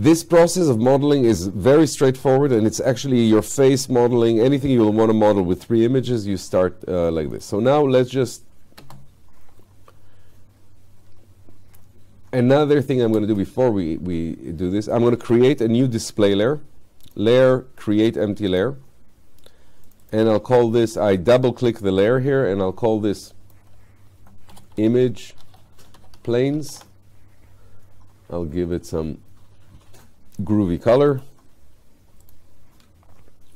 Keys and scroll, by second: 8.9 space, 13.1 space, 24.5 shift+i.